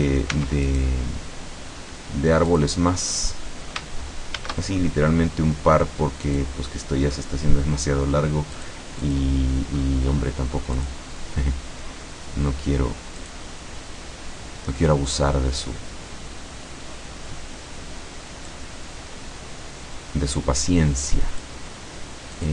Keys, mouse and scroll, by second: 0.0 right click, 0.4 Tab, 0.7 right click, 2.6 click, 4.4 shift+a, 6.3 click, 8.6 click, 9.0 click, 9.8-10.4 scroll down 1, 10.8 click, 13.2 click, 18.5-21.7 drag, 22.4 click.